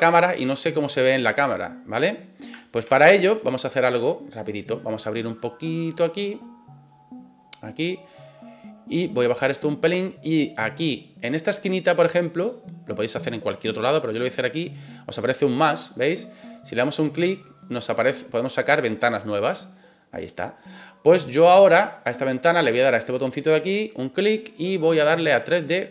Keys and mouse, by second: 2.8 ctrl+z, 4.9-7.5 drag, 9.3 click, 16.8-19.7 drag, 21.5 click, 23.8-25.9 drag.